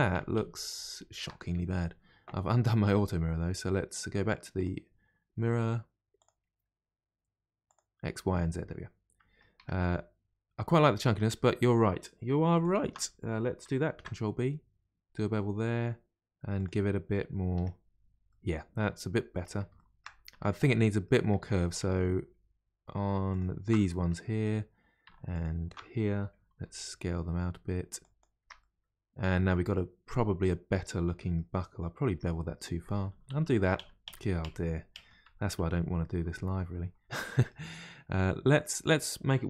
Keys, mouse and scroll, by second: 4.6 click, 6.2 click, 7.7 click, 8.4-9.6 middle drag, 9.6 Tab, 9.8-11.2 middle drag, 11.2 Tab, 12.6 alt+click, 13.9 ctrl+b, 17.5 Tab, 17.9-18.3 scroll down 1, 18.3 middle click, 19.0-19.7 scroll up 2, 19.7 scroll up 1, 19.7 shift+middle click, 20.3 Tab, 20.8 middle click, 21.3 Tab, 21.8 Tab, 23.3 alt+click, 23.9-25.3 middle drag, 25.3 alt+shift+click, 26.5 s, 28.4 Tab, 28.6-29.6 middle drag, 29.6-30.1 scroll down 2, 30.1-31.6 middle drag, 31.6 scroll up 2, 32.1 Tab, 32.4 middle click, 33.1 ctrl+z, 33.3-35.0 ctrl+z, 37.2-39.4 middle drag.